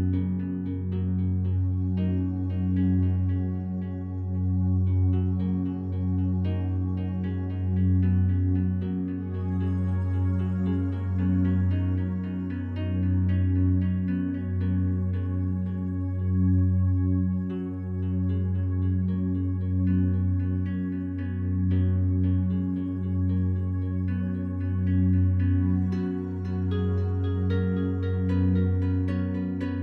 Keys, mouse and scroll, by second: 0.1 click, 1.0 ctrl+alt+shift+click, 1.4-2.2 ctrl+alt+drag, 2.3 click, 2.6 click, 3.2 click, 4.0 Tab, 5.5-6.7 drag, 7.8-9.1 drag, 9.1 s, 11.3 click, 13.0 Tab, 14.6 click, 15.8 ctrl+alt+click, 16.9 ctrl+s, 17.4-22.4 drag, 22.5-26.0 alt+shift+drag, 26.0 Tab, 27.6 1, 29.0 ctrl+alt+click.